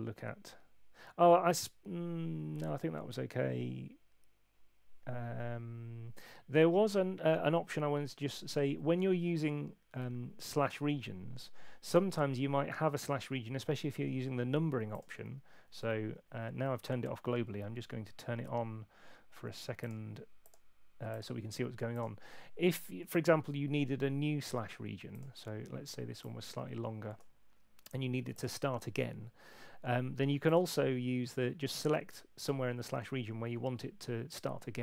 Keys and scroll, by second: 15.7 super+8.